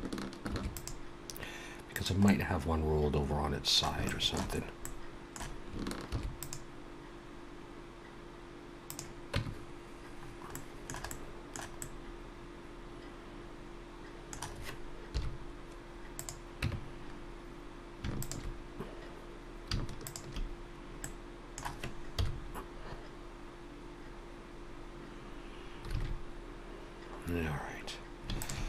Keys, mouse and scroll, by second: 0.4 ctrl+r, 2.2 middle click, 4.0 shift+middle click, 4.5-5.2 scroll up 2, 4.8 middle click, 6.0 ctrl+r, 9.3 Tab, 10.2-11.0 scroll down 3, 10.5 middle click, 11.0 middle click, 11.8 middle click, 15.1 KP_1, 16.1 click, 16.6 Tab, 17.1-18.0 scroll up 2, 18.2 alt+shift+click, 20.0 alt+shift+click, 21.0 middle click, 22.1 KP_1, 25.9 alt+a, 27.2-27.6 scroll down 2, 28.3 alt+shift+click.